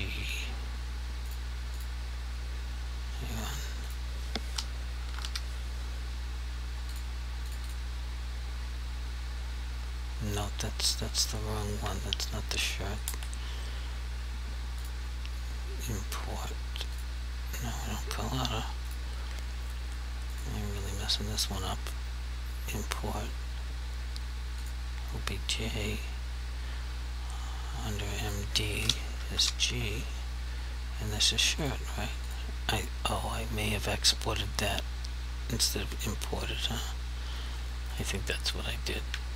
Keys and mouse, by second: 0.5 typing, 1.3 click, 5.0 typing, 6.9 click, 7.6 double click, 11.8 g, 12.7 click, 13.1 Delete, 14.8 click, 24.6 click, 28.3 click, 29.2 s, 29.5 g, 31.6 click, 37.9 click, 39.1 g.